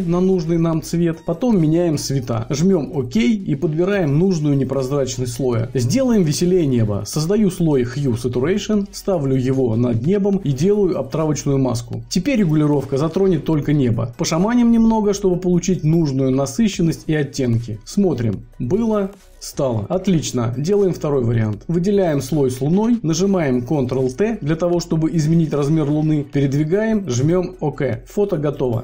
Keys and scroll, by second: 22.8 ctrl+t.